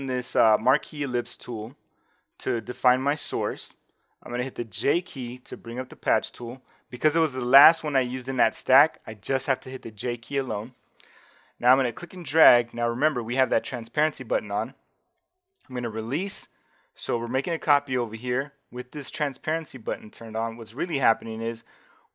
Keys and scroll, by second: 4.7 j.